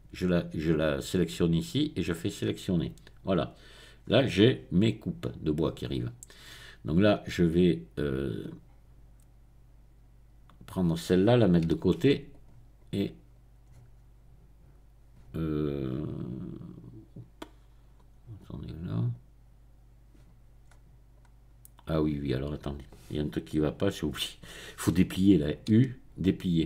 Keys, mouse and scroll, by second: 2.1 click, 4.0-5.1 scroll up 1, 8.4-10.8 drag, 11.8 g, 12.3 click, 13.7-15.0 scroll up 1, 15.0-16.0 middle drag, 17.0-18.0 scroll down 1, 18.4-19.6 drag, 20.6-21.2 scroll up 2, 21.2-22.3 scroll down 2, 25.8 u.